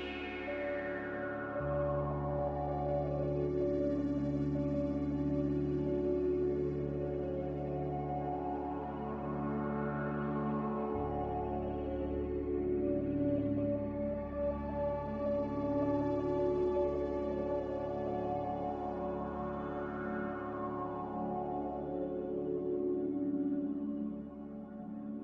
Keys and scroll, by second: 1.0 Delete, 1.5 g, 4.7 c, 8.9 z, 19.0 5.